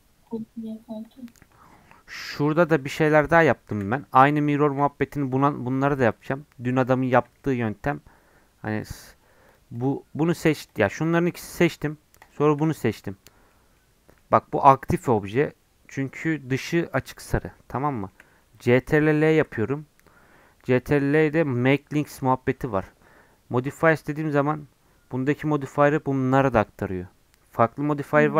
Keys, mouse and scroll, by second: 0.3 click, 1.3 middle click, 1.5 scroll up 5, 2.2 scroll down 4, 2.6-3.7 drag, 3.7 shift+d, 4.7 s, 6.1 click, 6.5 middle click, 7.4 shift+scroll down 1, 7.7-8.8 middle drag, 8.8-13.0 drag, 13.0-15.0 middle drag, 15.0 scroll up 1, 15.1 middle click, 15.5-17.1 scroll down 1, 17.1-19.2 middle drag, 19.2 ctrl+l.